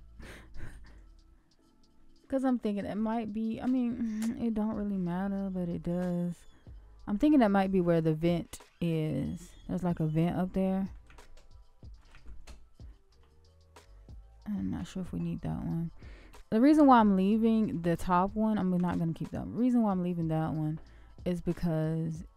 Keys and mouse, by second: 0.5-4.4 middle drag, 4.7-5.5 middle drag, 5.8-7.1 middle drag, 11.3 ctrl+z, 12.4 ctrl+z, 13.0-15.2 middle drag, 17.0-17.6 shift+middle drag, 18.7 x, 21.2-22.3 middle drag.